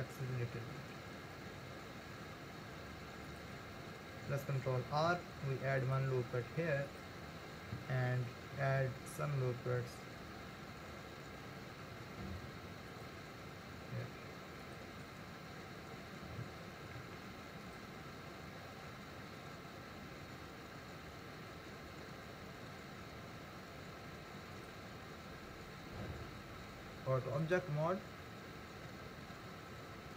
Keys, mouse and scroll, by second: 5.1 ctrl+r, 8.6 ctrl+r, 17.0 ctrl+r, 26.2 Tab.